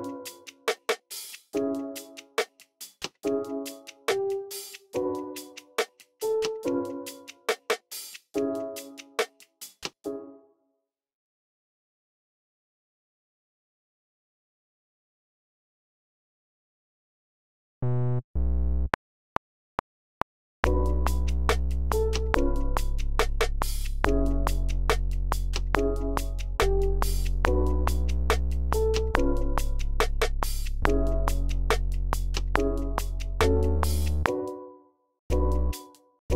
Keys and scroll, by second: 0.4-4.4 typing, 6.1 typing, 7.3 typing, 7.7 alt+super+l, 9.7 space, 10.5 x, 10.7 y, 17.3 super+k, 17.6 j, 18.1 z, 18.8 r, 20.5-21.4 typing, 22.6-23.3 typing, 24.4-25.1 typing, 27.0-31.7 typing, 33.6-34.3 typing, 34.5 super+k, 35.6-36.3 typing.